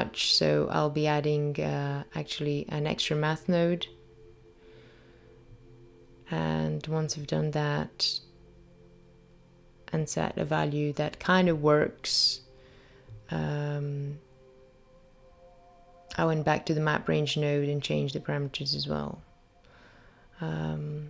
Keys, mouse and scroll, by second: 1.5 click, 8.1 click, 11.1 click, 11.7 click, 12.9 click, 16.9 shift+a.